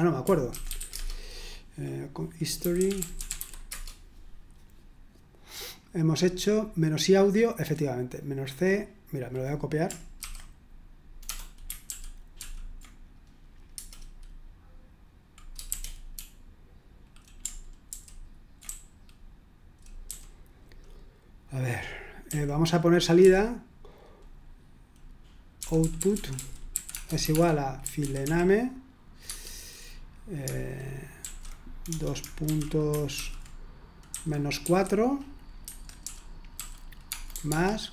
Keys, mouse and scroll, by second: 0.3-1.3 typing, 2.3-3.8 typing, 8.2-9.7 drag, 11.9 ctrl+p, 12.4 ctrl+p, 13.7 Return, 15.7-17.2 typing, 17.8 ctrl+u, 18.7-20.5 typing, 22.2-23.7 typing, 25.3-29.7 typing, 31.2-32.4 typing, 34.1-34.6 typing, 35.6-37.9 typing.